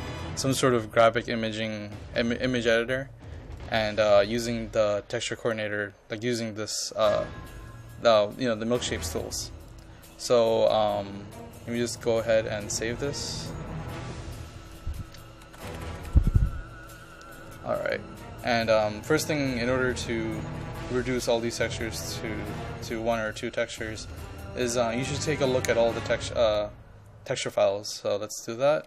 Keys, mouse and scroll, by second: 15.2-16.6 typing, 21.4-22.1 scroll down 1, 22.1-22.8 scroll up 1, 23.3 click.